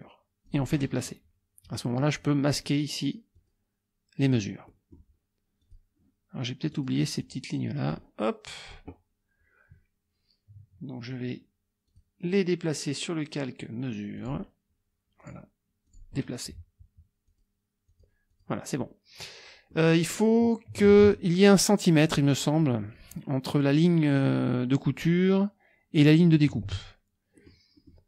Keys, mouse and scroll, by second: 0.5 click, 3.3 click, 4.7 click, 5.6 click, 6.7 click, 7.2 click, 7.9 click, 11.9 click, 14.2 click, 15.2 click, 15.9 click, 17.3 click, 17.9 click, 18.3 click, 19.7 middle click, 19.9 click, 20.9 alt+Tab, 26.7 alt+Tab, 27.4 click, 27.8 click.